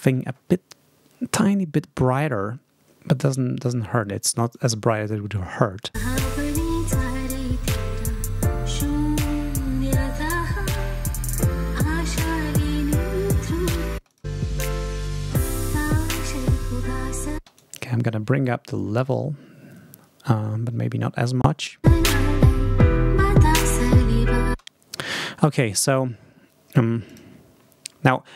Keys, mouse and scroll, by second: 4.4 click, 5.4 ctrl+scroll up 2, 5.9 ctrl+space, 12.9-13.3 ctrl+scroll down 2, 13.9 ctrl+space, 14.0 ctrl+click, 14.5 ctrl+scroll up 2, 17.3 space, 17.5-21.0 scroll up 1, 21.0 scroll up 1, 21.7 space, 23.2 click, 24.4 space, 25.6 scroll up 2, 27.0 click.